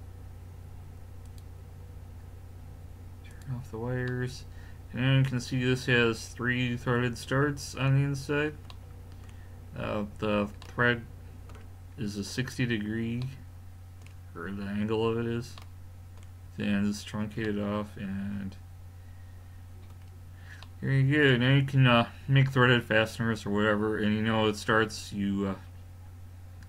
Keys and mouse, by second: 1.3 click, 3.2 middle click, 3.3-4.3 drag, 4.3-5.3 middle drag, 8.2-9.5 middle drag, 10.8-13.4 middle drag, 15.6 middle click, 16.0-18.4 middle drag, 20.0 middle click, 20.7-23.3 middle drag.